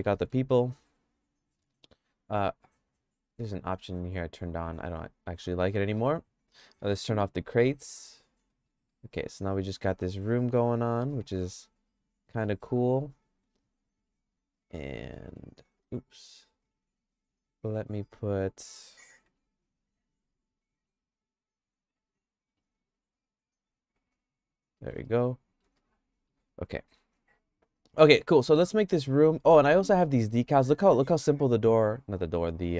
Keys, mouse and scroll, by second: 0.1 middle click, 0.5-1.7 shift+middle drag, 3.1 click, 6.0 middle click, 7.9 click, 8.5 middle click, 9.0-10.0 shift+middle drag, 10.5 click, 11.2-12.5 shift+middle drag, 13.5 Tab, 14.0 Tab, 15.3 click, 16.0 click, 17.7 `, 19.3 q, 20.7 q, 22.1 click, 22.5 q, 24.8 middle click, 25.2 shift+middle click, 25.8 middle click, 31.8 click.